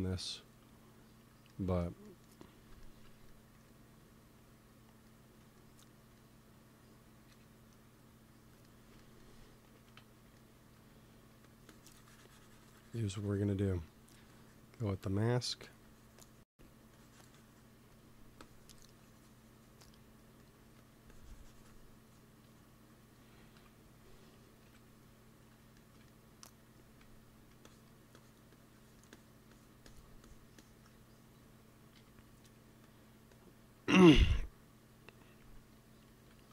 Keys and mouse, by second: 3.4 f, 4.0-5.8 drag, 7.2 KP_1, 9.1 middle click, 9.8 m, 10.6 f, 11.2 f, 12.0-13.3 drag, 14.2-17.7 drag, 16.4 f, 17.7 f, 20.6 f, 21.0 click, 21.0 right click, 23.5 ctrl+i, 24.5 KP_1, 26.9 f, 27.5-32.2 drag, 31.8 t, 32.2 middle click, 32.7-36.5 drag.